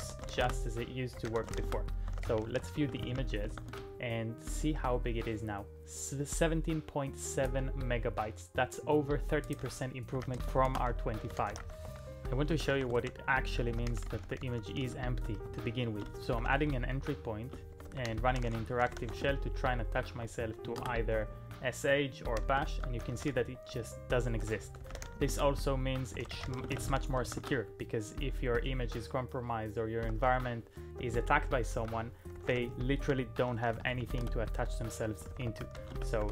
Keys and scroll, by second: 0.0-3.5 typing, 3.7 Return, 9.9-20.8 typing, 22.7 ctrl+p, 22.8-27.4 typing, 30.1 ctrl+p, 30.3 ctrl+p, 31.0 ctrl+p, 31.7-36.3 typing.